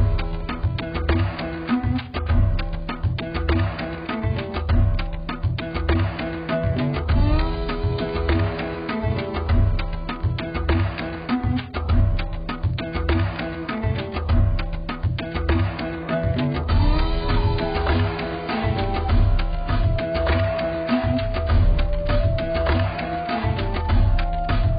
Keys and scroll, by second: 3.7 x, 21.0 z, 22.5 z.